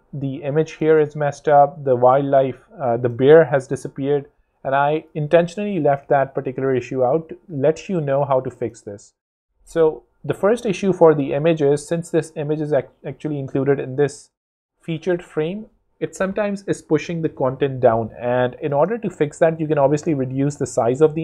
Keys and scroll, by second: 3.9 super+Tab, 6.8 z, 7.7 super+z, 8.6 super+space, 9.2 space.